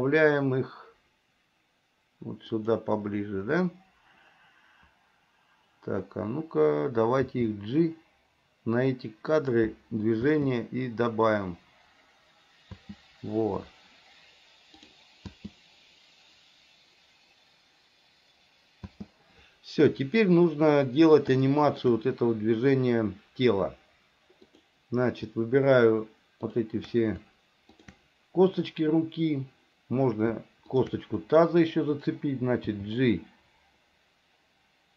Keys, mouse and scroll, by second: 7.3 g, 10.4 space, 12.9 space, 14.9 click, 19.0 space, 21.5 middle click, 24.5 click, 26.6 shift+click, 27.8 shift+click, 30.8 shift+click, 32.7 g.